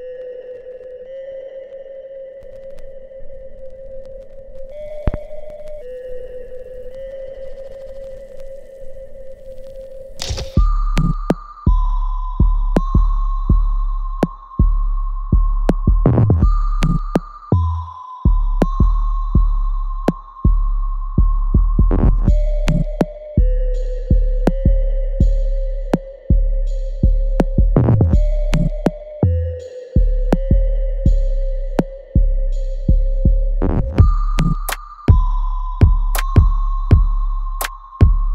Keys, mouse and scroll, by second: 8.5 right click, 9.2 click, 9.5-11.4 alt+right drag, 11.4 click, 15.1 alt+right click, 15.9 click, 16.3 alt+middle click, 17.2-22.0 drag, 24.3 alt+middle click, 24.8-28.3 alt+right drag, 28.3-30.1 alt+right drag, 30.1 ctrl+z, 33.5 click.